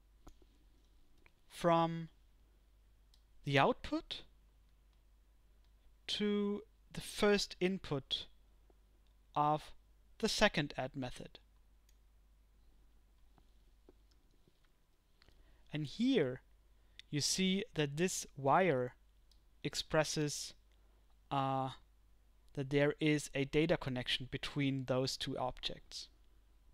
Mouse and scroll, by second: 3.7 click, 5.1-12.0 drag.